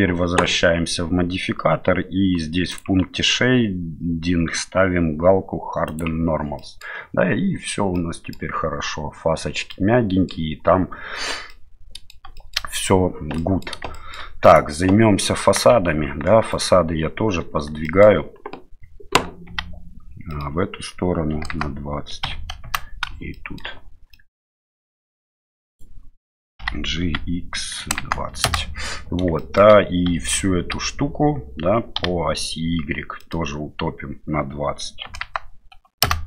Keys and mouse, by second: 2.8 click, 5.9 click, 6.6 middle click, 7.9 middle click, 9.7 middle click, 11.5 middle click, 12.3 shift+middle click, 13.3 middle drag, 13.9 shift+middle drag, 14.4 right click, 15.7 Tab, 16.5 right click, 17.8 middle click, 19.5 g, 23.3 shift+middle click, 24.1 middle click, 24.6 middle click, 25.7 right click, 26.6 g, 29.4 shift+middle click, 30.1 a, 30.7 a, 32.0 g.